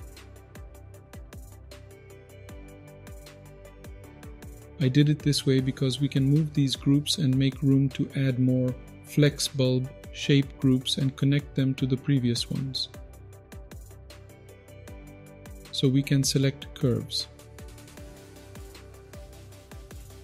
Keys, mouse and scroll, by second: 1.8 click, 3.0-4.2 drag, 4.3 click, 5.2-6.8 drag, 7.4 click, 8.0-9.2 drag, 9.8 shift+d, 10.9 click, 12.3-13.1 drag, 13.7-14.3 drag, 14.6-15.2 drag, 15.5 click, 16.5-17.9 drag, 18.5 click, 19.3 click, 19.6 middle click.